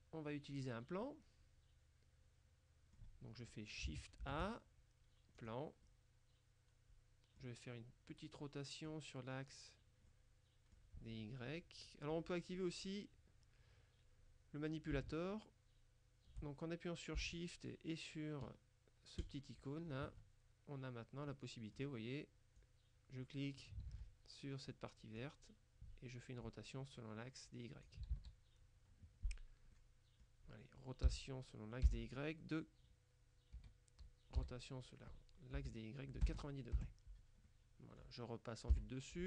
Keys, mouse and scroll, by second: 1.1-3.5 middle drag, 4.3 shift+a, 5.4 click, 8.3-9.4 middle drag, 10.2-11.3 middle drag, 19.3 shift+click, 21.4 middle click, 22.6-24.2 drag, 23.9 ctrl+z, 25.3-28.5 drag, 28.2 ctrl+z, 29.8 click, 31.2 r, 32.0 z, 33.7 Escape, 34.5 r, 35.6 y, 36.4 KP_0, 36.8 KP_Enter, 37.6 click, 37.9 middle click, 38.5 click, 38.8 KP_7.